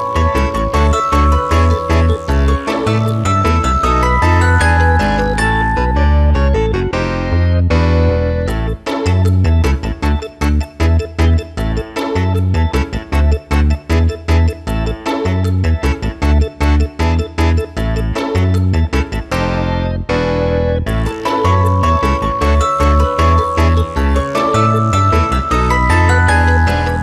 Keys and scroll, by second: 0.3 ctrl+space, 0.6 Return, 6.6 space, 8.0 ], 8.8 space, 12.2 Return, 13.4 alt+space.